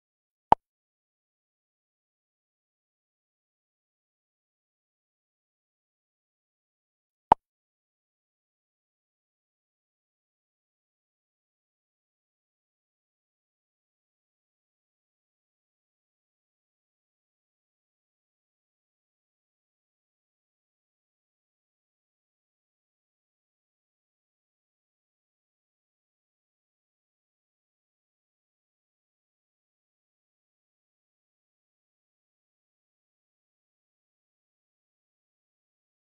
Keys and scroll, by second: 7.6 space, 9.3 space, 11.1 space, 19.3 space, 21.0 space, 23.3 space, 26.4 space, 29.7 space, 34.5 space.